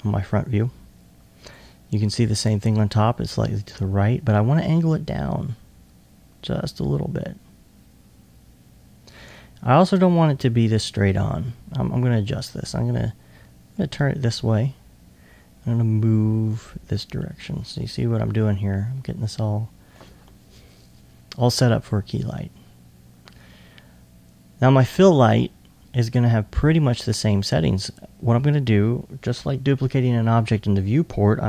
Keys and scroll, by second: 2.4-4.3 typing, 15.0 e.